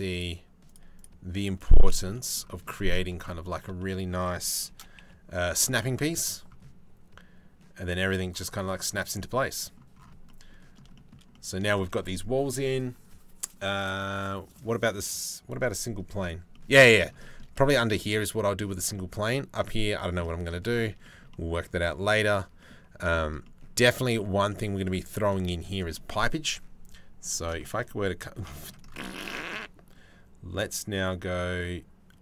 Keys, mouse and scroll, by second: 1.9 middle click, 2.3 middle click, 2.7 shift+middle click, 3.4 shift+middle click, 4.4 shift+d, 8.6 click, 8.8 middle click, 10.0 click, 10.6 shift+middle click, 16.5 middle click, 16.9 shift+middle click, 18.6 middle click, 19.8 middle click, 20.7 shift+middle click, 20.9 middle click, 21.5 shift+middle click, 22.2 middle click, 22.8 shift+middle click, 23.3 middle click, 23.8 shift+middle click, 24.1 middle click, 25.3-27.0 shift+middle drag, 27.3 shift+middle click, 27.5 middle click, 28.2 shift+middle click, 28.8-31.9 shift+middle drag.